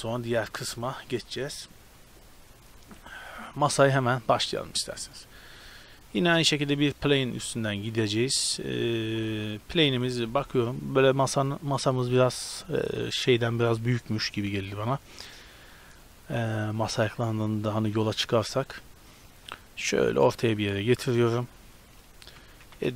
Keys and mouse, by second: 1.6-7.0 middle drag, 6.3 shift+a, 7.0-7.4 drag, 7.4 middle click, 8.3 drag, 9.9 KP_7, 10.1 z, 19.0-22.4 drag, 22.4 Tab, 22.6 a.